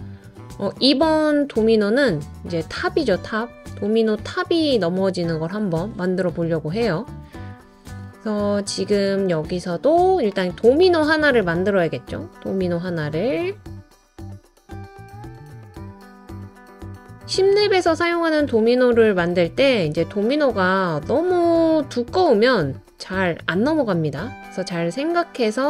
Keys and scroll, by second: 5.3 typing, 9.4 typing, 10.7 typing, 16.1 typing.